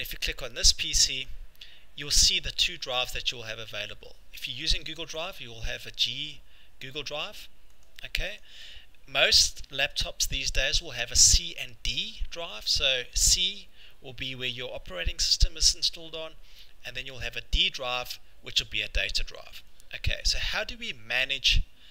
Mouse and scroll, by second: 0.6 click, 1.3 click, 7.8 click, 8.4 click.